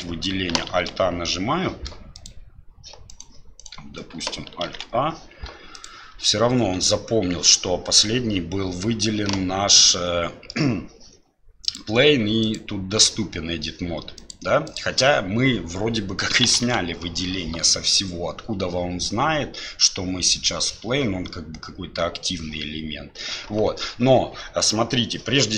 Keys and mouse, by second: 0.7 alt+a, 4.7 alt+a, 5.9-7.7 drag, 9.9-10.5 middle drag, 11.6-12.6 drag, 14.2-14.8 drag, 16.6 alt+a.